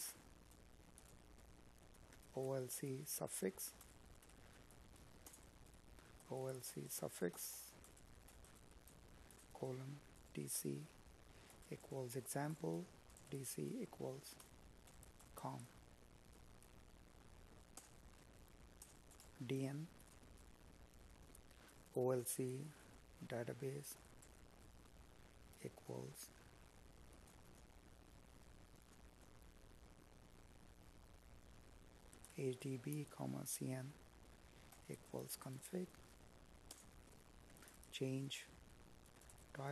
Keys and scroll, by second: 2.9 space, 14.4 space, 30.2 Tab, 34.1 space, 35.7 Tab, 38.7 space.